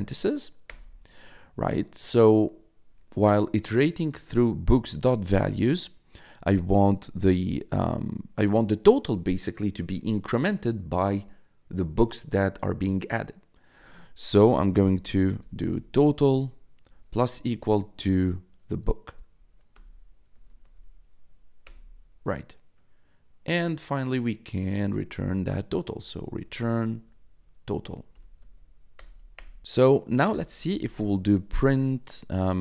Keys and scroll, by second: 0.6 Return, 1.9 Tab, 14.5-15.9 typing, 16.9 shift+=, 17.5 space, 19.1 v, 19.7 BackSpace, 19.8 b, 20.6 k, 21.6 Return, 24.4 Tab, 24.8 r, 26.4-28.8 typing, 28.9 Return, 30.0-32.6 typing.